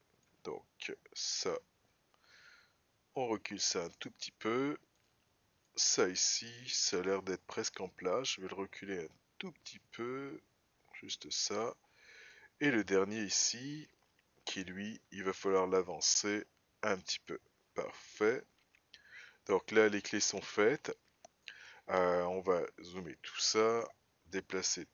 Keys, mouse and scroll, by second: 0.0 click, 2.3 g, 5.4 click, 7.8 g, 12.7 click, 15.0 g, 20.7 click, 22.7 scroll down 2, 24.7-24.9 shift+middle drag.